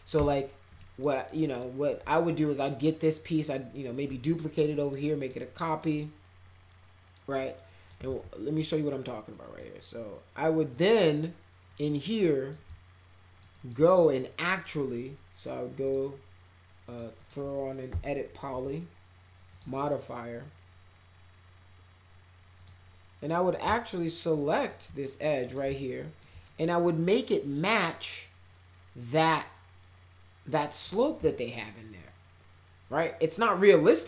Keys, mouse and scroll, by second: 0.7 middle click, 1.3 middle click, 2.2-4.0 shift+drag, 5.2 click, 5.7 click, 7.3 click, 8.0 ctrl+z, 8.5-9.5 drag, 10.7-12.5 drag, 12.6-13.4 alt+middle drag, 13.5 alt+middle click, 15.8 right click, 16.8 click, 17.1 click, 17.9 e, 18.5 e, 19.4 click, 22.5 click, 23.7-24.6 alt+middle drag, 25.2 click, 25.4 click, 25.7 alt+middle click, 26.4 middle click, 27.5-30.7 drag, 31.3-34.0 alt+middle drag.